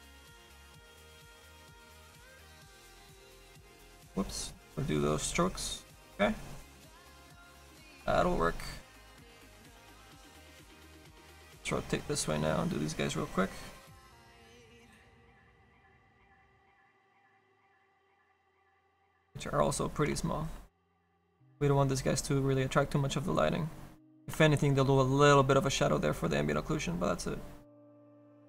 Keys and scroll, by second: 3.4 ctrl+z.